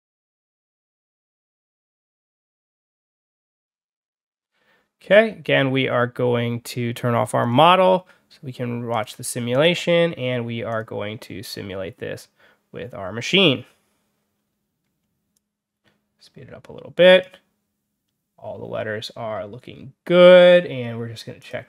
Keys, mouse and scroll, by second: 1.4 drag, 1.6-2.2 drag, 2.3-3.2 drag, 3.5 click, 7.3 click, 8.8 click, 9.4 click, 10.6 click, 15.2-17.1 drag, 21.3 click.